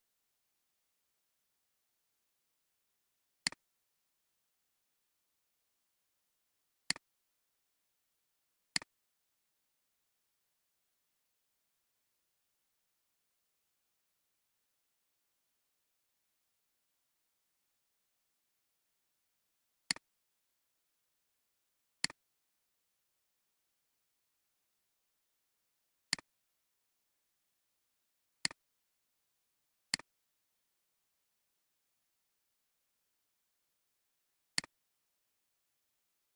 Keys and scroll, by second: 32.1 Tab.